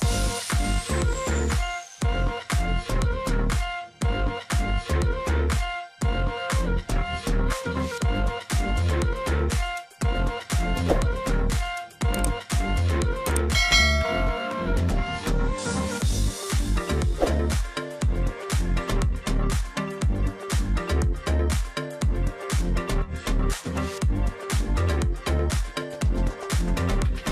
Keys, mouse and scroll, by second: 2.1 alt+shift+click, 2.9 alt+scroll down 1, 3.1-3.6 alt+scroll up 1, 12.7 double click.